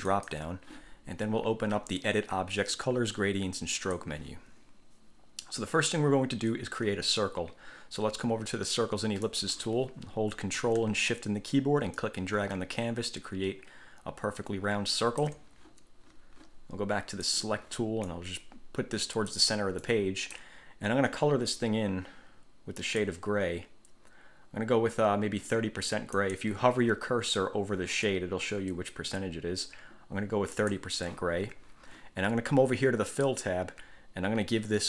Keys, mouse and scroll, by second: 0.3 click, 3.9 click, 9.4 click, 12.1-15.6 ctrl+shift+drag, 17.5 click, 18.3-19.7 drag, 20.0 click, 23.0 click, 26.3 click, 30.7 click, 33.3 click.